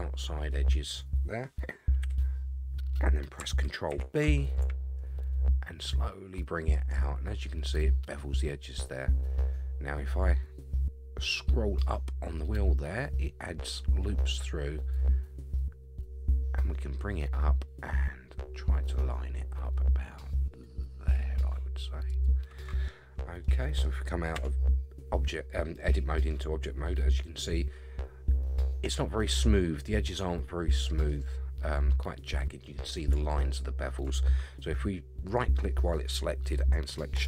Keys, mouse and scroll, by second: 0.5 middle click, 2.0 KP_1, 3.9 ctrl+b, 23.4 middle click, 24.3 Tab, 25.8-26.3 middle drag, 26.4-27.3 scroll up 3, 30.1-31.1 middle drag, 32.4-32.9 middle drag, 33.5-34.1 shift+middle drag, 35.3 right click.